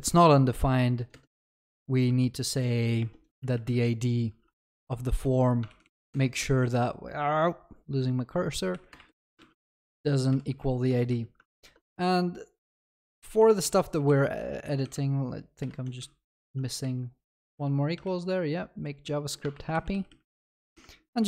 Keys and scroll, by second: 11.5 Delete, 11.6 ctrl+s, 12.1 ctrl+shift+Left, 13.6 ctrl+shift+Right, 18.1 ctrl+shift+Left, 21.2 ctrl+v.